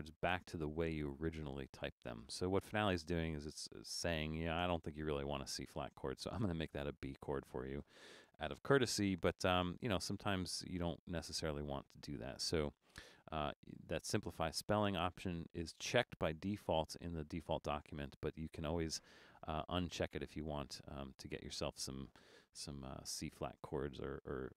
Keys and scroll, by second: 23.1 super+-, 23.7 super+-.